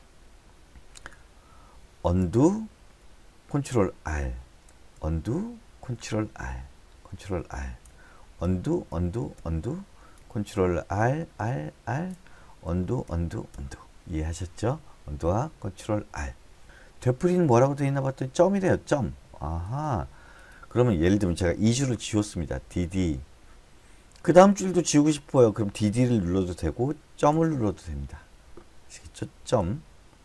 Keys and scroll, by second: 2.6 u, 4.3 ctrl+r, 5.3 u, 6.4 ctrl+r, 7.5 ctrl+r, 8.8 u, 9.3 u, 9.8 u, 10.9 ctrl+r, 13.1 u, 13.5 u, 13.9 u, 23.1 d, 23.3 d, 27.7 ., 30.0 ..